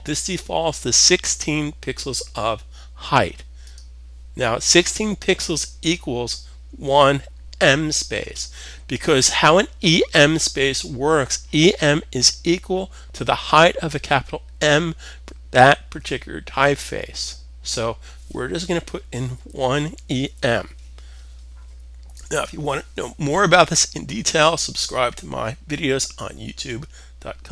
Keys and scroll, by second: 18.7-19.6 typing.